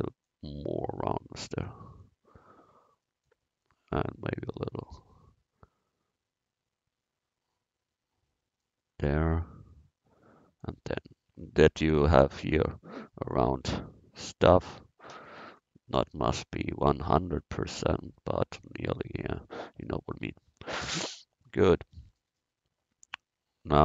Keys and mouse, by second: 1.5 click, 9.2-11.3 drag, 14.7 a, 15.1 c, 20.2 Tab.